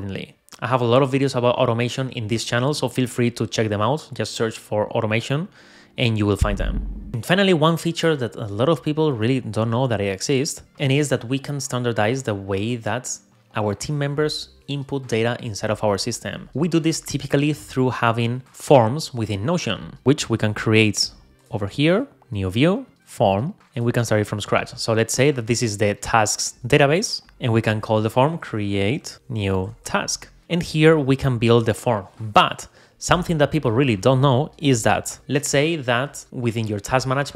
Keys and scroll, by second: 29.1 BackSpace.